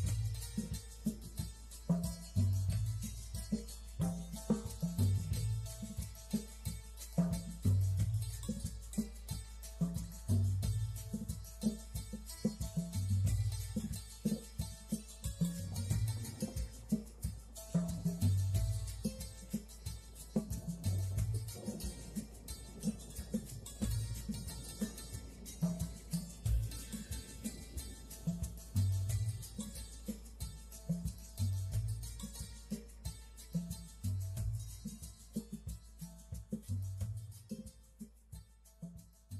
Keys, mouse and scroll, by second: 0.4 click, 2.5 click, 3.1 click, 4.5 click, 6.4-7.1 drag, 8.0 click, 8.6-9.9 drag, 10.3 click, 13.9 click, 14.3 click, 18.8 shift+a, 19.8 click, 21.0 s, 22.0 click, 23.1 s, 23.6 click, 26.1 g, 27.0 click, 28.9 shift+a, 30.9 click, 31.7 s, 32.4 click, 35.4 click, 36.8 ctrl+click, 38.6 click.